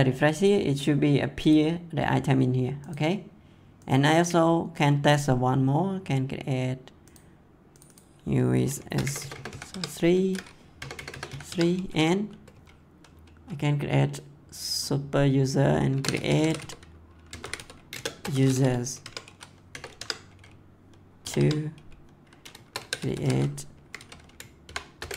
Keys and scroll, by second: 8.7 shift+s, 9.0 0, 9.7 Tab, 10.7 0, 11.5 Tab, 15.7-18.2 typing, 19.0 Tab, 19.7 0, 19.9 Tab, 21.2 2, 21.3 Tab, 22.7 c, 24.6-25.1 typing.